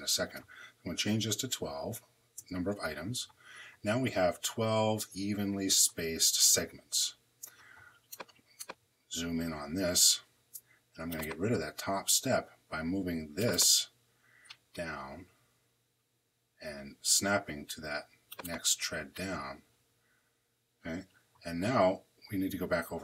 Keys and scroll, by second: 0.7-1.6 typing, 2.2 Return.